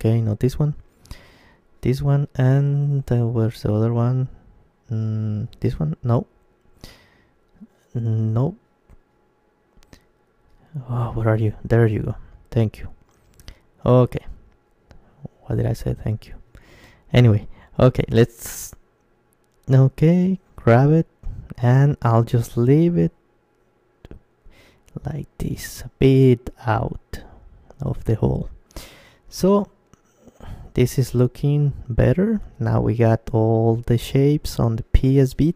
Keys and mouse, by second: 0.1 ctrl+z, 0.9-2.7 right drag, 4.9-6.6 right drag, 6.6 ctrl+z, 7.3-9.2 right drag, 10.2-12.1 right drag, 12.1-14.2 middle drag, 13.1 KP_3, 16.3 KP_Decimal, 18.0-19.8 middle drag, 18.6 z, 19.3 z, 20.3 z, 20.4 g, 25.3-27.3 drag, 26.5 middle click, 27.3 Tab, 27.3-32.5 middle drag, 27.9 Tab, 31.9 KP_Decimal, 33.0-35.5 middle drag.